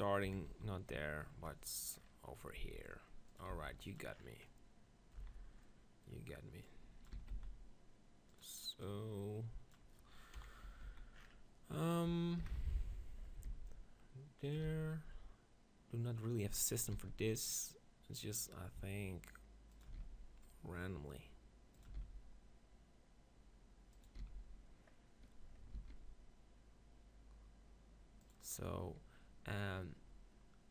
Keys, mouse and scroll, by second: 0.2 KP_7, 0.5 z, 2.6 g, 3.6 s, 4.0-5.8 drag, 5.2 z, 6.6-9.4 drag, 7.1 s, 10.5 KP_7, 10.7 Tab, 10.9 z, 13.4 ctrl+l, 13.5 shift+d, 14.5-16.4 drag, 14.7 shift+d, 16.9 shift+d, 19.8-21.7 drag, 20.1 shift+d, 21.8-23.7 drag, 22.0 shift+d, 24.0-25.8 drag, 24.2 d, 25.8 shift+d, 28.3-30.1 drag.